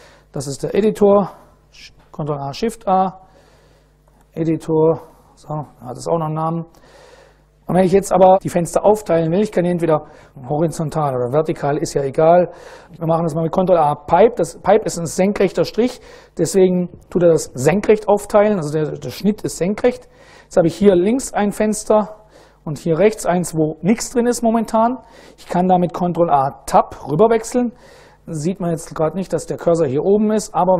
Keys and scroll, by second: 0.6 ctrl+a, 2.1-4.8 typing, 4.8 Return, 13.2 ctrl+a, 15.9 shift+\, 25.7 ctrl+a, 26.5 Tab.